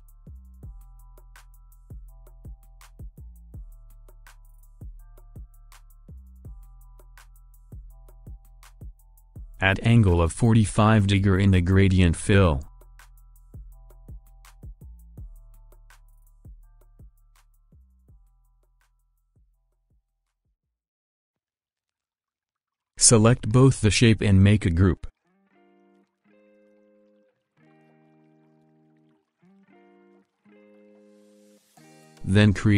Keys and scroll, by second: 1.1 |, 10.3 4, 10.7 5, 16.4 4, 16.7 5.